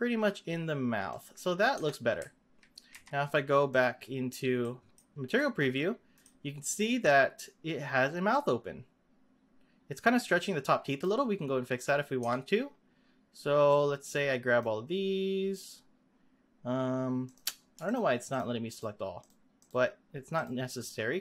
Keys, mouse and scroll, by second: 1.7 Tab, 2.1 z, 2.9 z, 3.7 click, 4.1-4.5 scroll down 3, 4.6-5.1 middle drag, 5.1 scroll down 1, 5.4-6.4 middle drag, 6.4-8.3 scroll down 3, 8.3-11.3 drag, 11.4-11.7 scroll up 2, 11.7 click, 12.2 Tab, 12.5-13.7 scroll up 3, 13.7 click, 17.2 click, 17.8 shift+click, 18.2 shift+click, 18.6 shift+click, 19.6 shift+click, 20.4 shift+click, 20.7 shift+click.